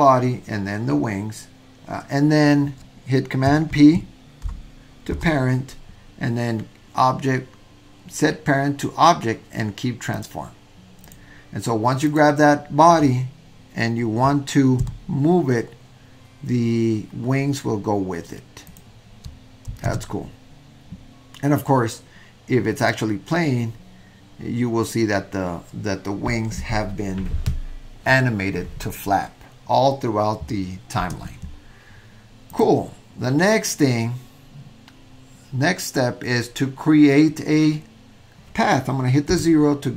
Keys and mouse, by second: 5.1 super+p, 11.1 drag, 12.1 click, 14.8 g, 20.0 super+z, 23.0 click, 31.1 space, 39.3 KP_0.